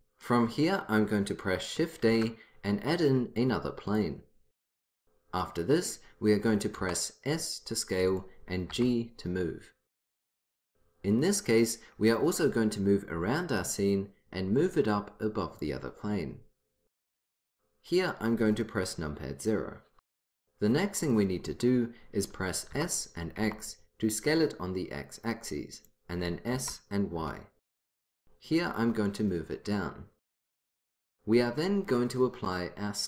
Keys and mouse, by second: 2.2 shift+a, 6.9 s, 8.8 g, 12.5-14.7 middle drag, 14.7-16.7 drag, 19.3 KP_0, 22.8 s, 26.4 s, 29.2-31.1 drag.